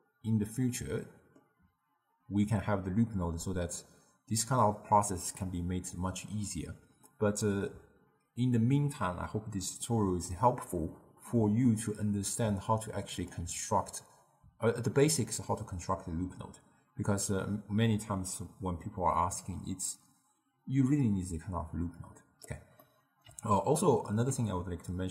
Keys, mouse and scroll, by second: 13.4 click, 22.9-25.1 middle drag.